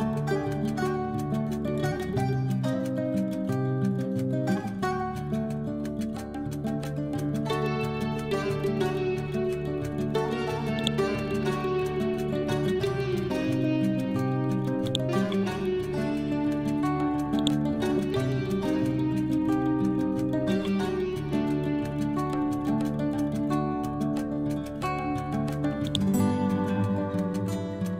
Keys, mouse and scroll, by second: 0.0-7.8 typing, 8.4 ctrl+a, 10.7 click, 14.7 click, 17.3 click, 25.7 click, 26.9-27.9 typing.